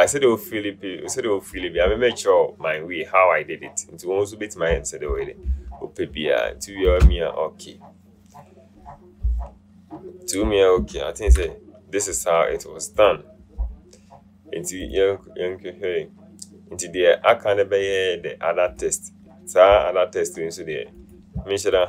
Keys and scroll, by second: 7.1 Return, 11.4 ctrl+0.